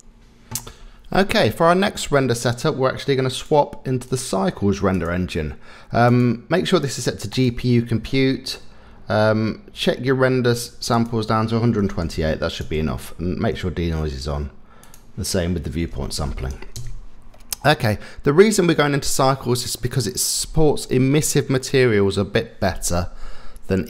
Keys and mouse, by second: 1.4-2.3 middle drag, 4.1-5.1 drag, 6.2-7.4 drag, 11.1-12.6 drag, 14.9-16.8 drag, 17.7 middle click, 21.6-23.0 middle drag.